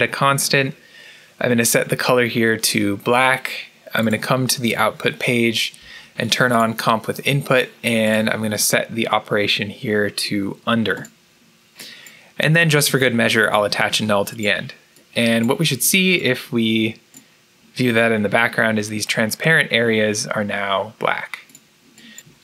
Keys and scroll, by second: 13.3 alt+n.